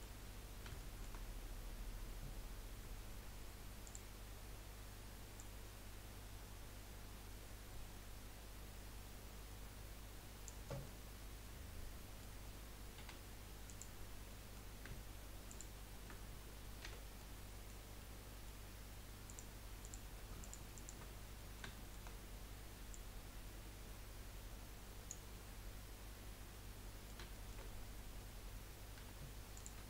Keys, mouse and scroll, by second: 0.3-0.8 scroll up 2, 0.8-2.2 shift+middle drag, 2.2-3.9 scroll down 3, 3.9 click, 4.3-4.8 scroll up 4, 5.3 click, 10.8-13.0 middle drag, 13.0 2, 13.6 click, 14.3-15.5 middle drag, 15.5 shift+click, 16.8 f, 17.3-19.2 middle drag, 19.2 click, 19.8 click, 20.4 alt+shift+click, 20.7 alt+shift+click, 21.1 scroll down 3, 21.3-22.9 middle drag, 22.9 click, 25.3-27.7 middle drag, 27.7-29.0 scroll up 1, 29.0 3, 29.5 click.